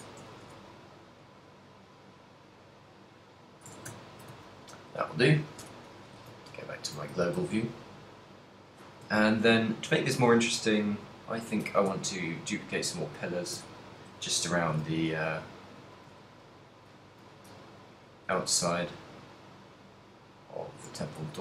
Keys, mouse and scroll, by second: 0.4 Tab, 1.3 middle click, 2.3 middle click, 3.8 Tab, 4.0 ctrl+middle click, 5.2 middle click, 5.2 a, 5.7 KP_Divide, 6.4 z, 6.7 ctrl+middle click, 7.3 z, 7.4 a, 7.7 shift+middle click, 8.1 middle click, 9.3 shift+middle click, 10.4 middle click, 11.2 middle click, 12.1 z, 12.6 right click, 13.1 right click, 13.8 Tab, 14.3 a, 14.8 KP_7, 15.9 right click, 16.5 shift+right click, 17.5 right click, 18.6 shift+right click, 18.6 shift+d, 21.1 click.